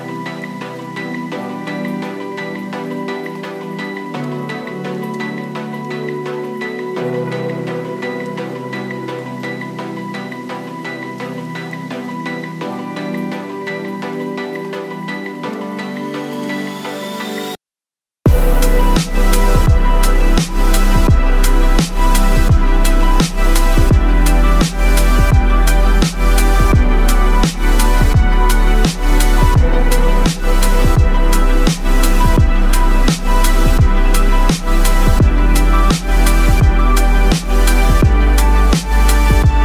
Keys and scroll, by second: 0.0-3.4 typing, 4.6-7.2 typing, 8.4-16.1 typing, 18.0 ctrl+t, 20.4-22.8 typing, 24.4 typing, 26.8-39.6 typing.